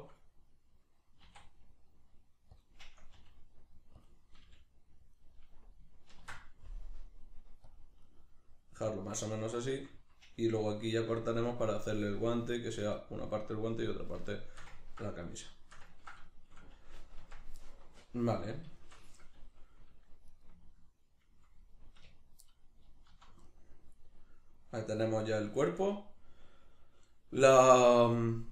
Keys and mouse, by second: 1.3 e, 2.6 click, 3.1 r, 4.1 click, 4.4 g, 5.1 click, 6.2 ctrl+r, 8.1 right click, 9.1-20.3 middle drag, 17.2 Tab, 20.3 shift+right click, 22.0 \, 22.5-28.5 middle drag, 23.1 z.